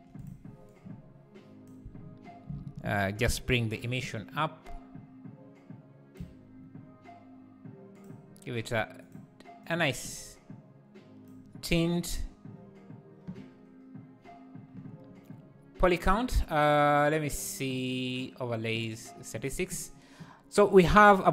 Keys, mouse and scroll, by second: 0.2 click, 0.7 click, 4.0-9.0 shift+drag, 19.3-21.3 drag.